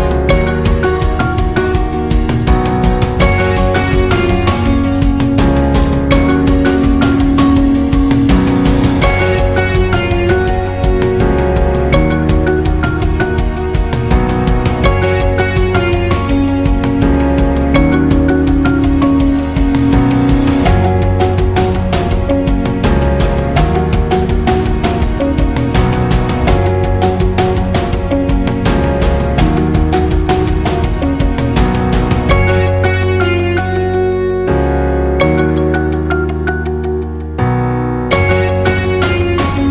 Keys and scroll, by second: 23.3-24.0 space, 32.8 Escape.